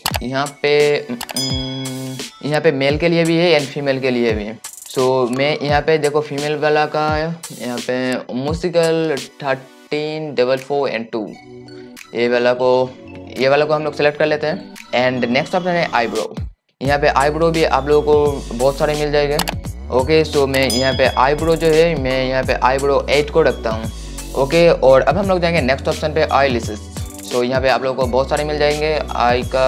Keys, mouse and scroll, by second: 2.2 right click, 29.4-29.6 scroll up 1.